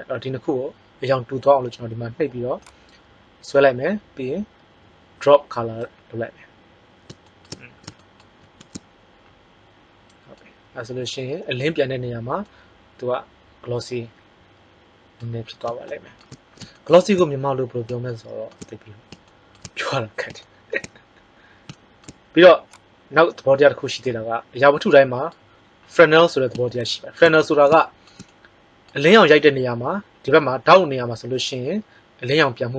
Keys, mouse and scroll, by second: 2.7-3.4 drag, 8.4 shift+z, 22.7 click.